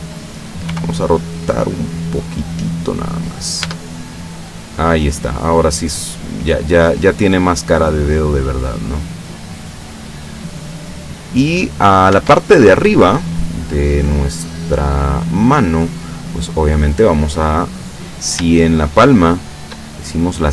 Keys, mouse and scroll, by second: 0.7 r, 2.7 click, 3.4 scroll down 1, 3.7 Tab, 4.1-7.1 middle drag, 11.0 scroll up 1, 11.6 right click, 12.2 Tab, 13.1-14.5 scroll up 1, 16.5 right click, 17.7 middle click, 18.9 shift+right click, 19.5 shift+right click, 20.0-20.5 shift+middle drag.